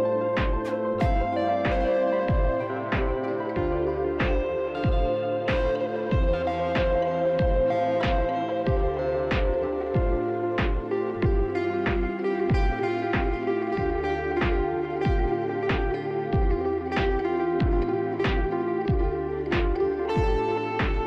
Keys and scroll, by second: 7.3 ctrl+z, 7.4 ctrl+z, 11.1 shift+s, 11.5 shift+s.